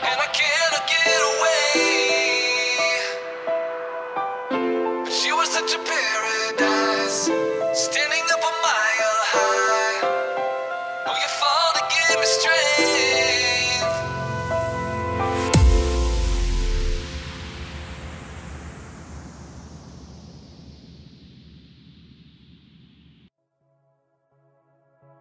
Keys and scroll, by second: 3.5 -, 12.3 +, 12.6 space, 12.7 r, 12.9 space, 14.0 space, 15.0 space, 15.8 space, 17.4 space, 18.8 space, 19.8 space, 20.9 space, 22.2 space, 23.3-25.1 typing.